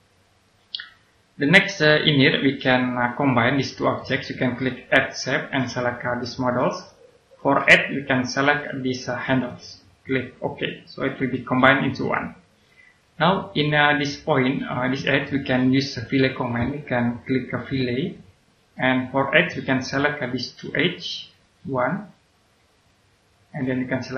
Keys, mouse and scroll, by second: 0.6-3.6 right drag, 3.9 middle click, 5.3 click, 12.1 right click, 14.6-17.9 scroll up 1, 17.9 click, 19.0-19.9 scroll up 1, 21.2 click.